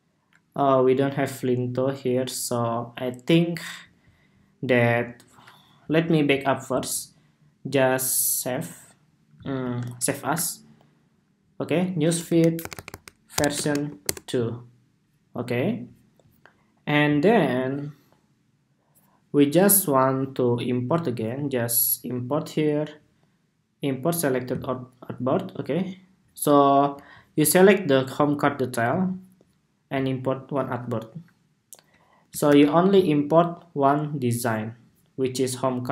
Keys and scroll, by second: 9.7 shift+super+s, 10.6 shift+super+s, 32.2 super+-.